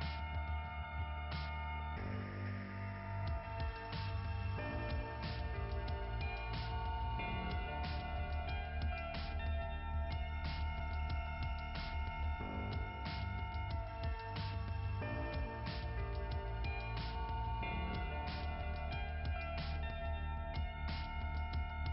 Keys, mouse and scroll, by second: 0.1 click, 0.4 click, 1.4 click, 1.7 click, 2.0 click, 3.8 click, 5.0 click, 6.9 click, 8.4 click, 8.9 click, 9.1 click, 10.8 scroll up 2.